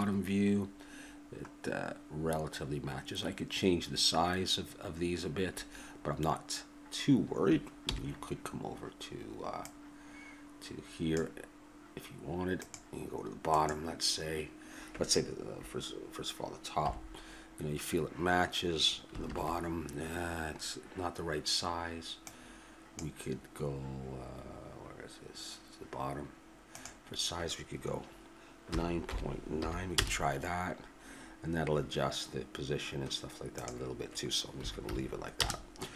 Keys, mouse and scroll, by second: 2.6-4.7 middle drag, 7.9 n, 9.6-15.4 drag, 16.9 KP_7, 22.2-26.0 drag, 26.7-30.0 drag, 33.6-35.4 drag.